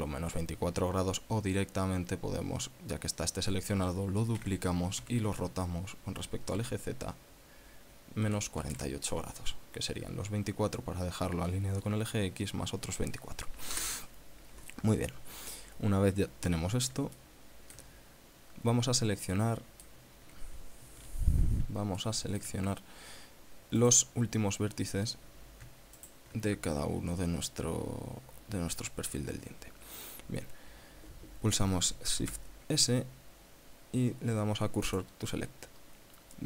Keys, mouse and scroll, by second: 4.7 shift+d, 5.3 r, 6.9 z, 8.6 KP_Subtract, 14.1 Return, 17.5 shift+click, 18.4-18.7 scroll up 2, 19.7 click, 21.3 KP_7, 22.3 shift+middle click, 23.6 scroll up 2, 24.1 right click, 24.9 scroll down 2, 26.3 shift+right click, 27.6-28.3 scroll down 4, 29.2-29.8 scroll up 4, 30.4 scroll up 2, 32.6 shift+s, 35.3 click.